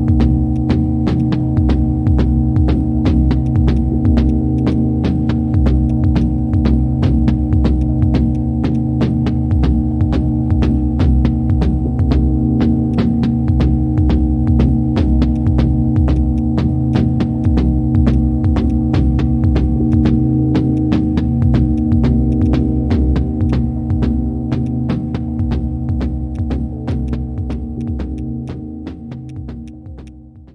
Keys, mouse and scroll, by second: 4.6 right click, 7.8 ctrl+shift+click, 9.3 ctrl+shift+space, 10.4 ctrl+shift+space, 11.0 ctrl+shift+space, 12.9 shift+click, 22.5 double click, 26.9 right click.